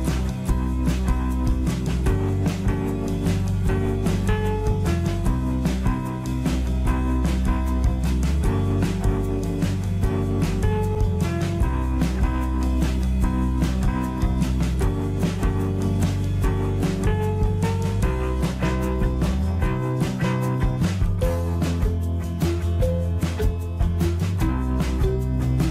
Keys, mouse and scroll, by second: 1.8-2.3 scroll down 1, 2.3-2.7 scroll up 1, 3.7-5.5 middle drag, 5.5-6.6 scroll up 1, 7.5 click, 10.0 shift+click, 17.1-21.0 middle drag, 22.1 e.